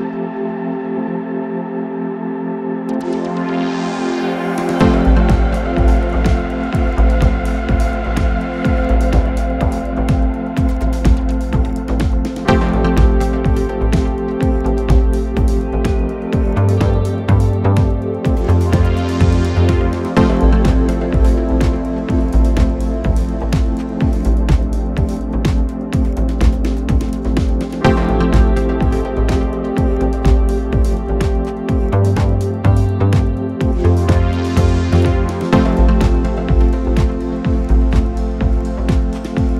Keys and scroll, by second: 5.5 4, 21.6 ctrl+F1, 27.3 shift+r, 27.9 Return, 31.0 Delete, 33.2 Delete.